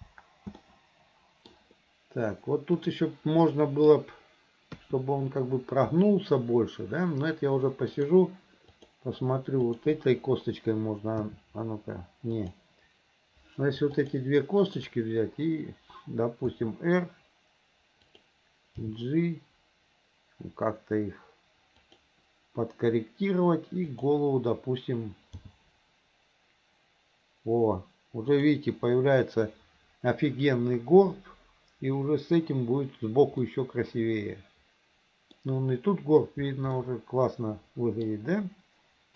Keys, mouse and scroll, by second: 0.0 space, 0.6-1.6 middle drag, 2.8 click, 3.5 middle click, 4.8 KP_3, 7.9 click, 8.8 click, 9.7 click, 11.3 r, 14.0 shift+click, 14.7 shift+click, 16.5 r, 18.9 g, 23.9 click, 25.4 g, 33.5-34.1 scroll up 2, 34.1-35.4 middle drag, 36.8-37.3 scroll up 2, 37.3-38.1 middle drag, 38.1 scroll down 2.